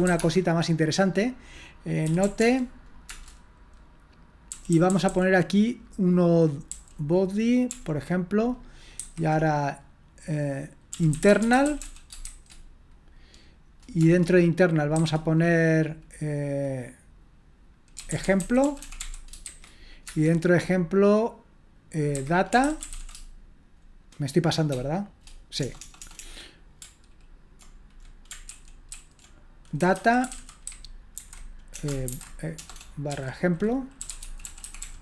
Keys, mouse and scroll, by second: 0.0-0.6 typing, 1.8-2.7 typing, 3.1 Return, 4.7-5.1 typing, 7.4-8.2 typing, 10.7-12.8 typing, 14.0 Return, 14.9 typing, 17.7-20.0 typing, 20.1 Return, 22.3-23.4 typing, 25.6-26.2 typing, 28.5 ctrl+w, 28.9 ctrl+w, 29.6-35.0 typing.